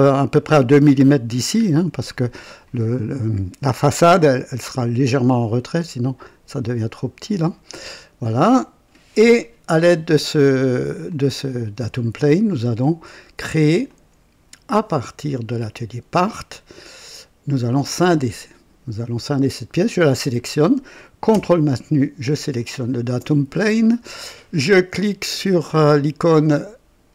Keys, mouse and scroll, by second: 1.6-1.9 scroll down 1, 2.1-2.8 drag, 9.4 click, 11.1 click, 13.9 click, 15.6 click, 16.8 click, 17.8 click, 19.8 click, 22.5 ctrl+click, 25.8 click.